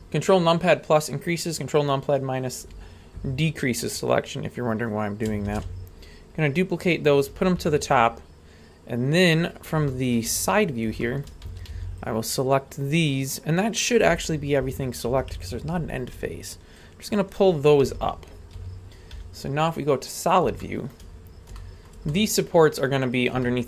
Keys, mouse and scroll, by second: 0.0 ctrl+KP_Add, 0.0 ctrl+KP_Subtract, 3.9-5.3 scroll down 3, 5.5 shift+d, 8.9-9.7 scroll up 4, 9.9-10.2 shift+middle drag, 10.3-10.9 scroll up 3, 11.0-11.3 shift+middle drag, 11.5 a, 11.7 b, 14.7 ctrl+KP_Add, 15.1 ctrl+KP_Add, 15.4 ctrl+KP_Add, 16.8 ctrl+click, 18.5 a, 19.1 z, 20.1 scroll up 2, 20.6 shift+middle click, 21.1 scroll up 2, 21.5 shift+middle click, 22.1 middle click, 23.4-23.6 shift+middle drag.